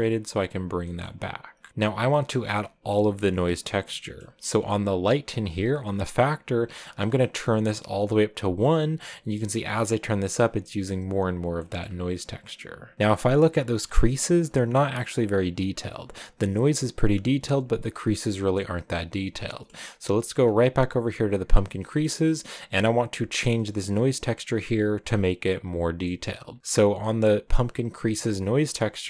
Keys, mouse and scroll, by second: 0.8 middle click, 1.7-2.6 scroll down 1, 2.6-9.1 drag, 11.4 middle click, 12.2-12.7 scroll up 1, 12.7-13.1 scroll down 1, 14.3 scroll up 1, 18.6 middle click, 19.6 middle click, 20.8-29.0 drag.